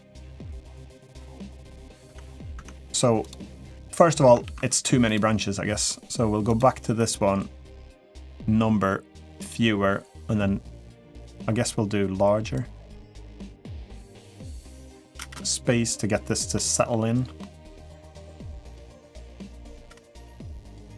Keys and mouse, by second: 1.2-1.5 middle drag, 1.8 Tab, 2.3 Tab, 3.6 middle click, 4.2 ctrl+s, 4.8 click, 7.7-9.3 drag, 12.4-14.2 drag, 14.9 space, 16.3-16.7 middle drag, 17.2-17.9 middle drag.